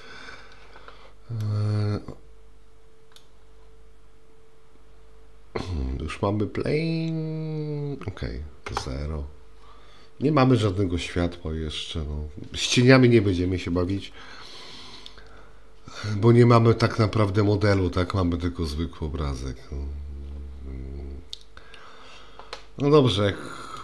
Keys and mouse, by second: 1.4-3.2 middle drag, 8.7 KP_0.